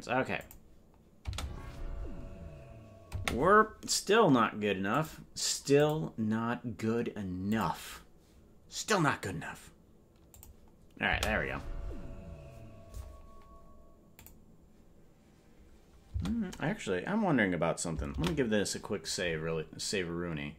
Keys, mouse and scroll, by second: 0.3 click, 1.2 space, 3.2 space, 4.9 click, 5.7 click, 8.0 click, 10.3 click, 11.0 space, 14.3 click.